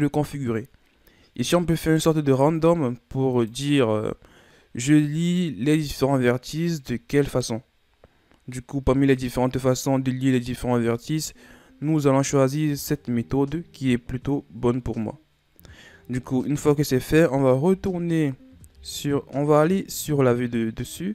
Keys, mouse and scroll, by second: 2.5-6.3 drag, 17.7 KP_7, 19.0-20.8 scroll down 5, 20.8-21.1 scroll up 1.